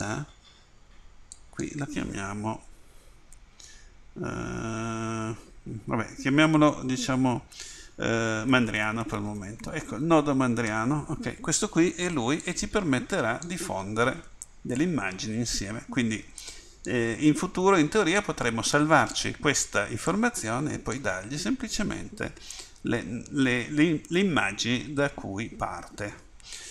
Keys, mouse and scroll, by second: 20.0 right click, 24.8-26.7 right drag.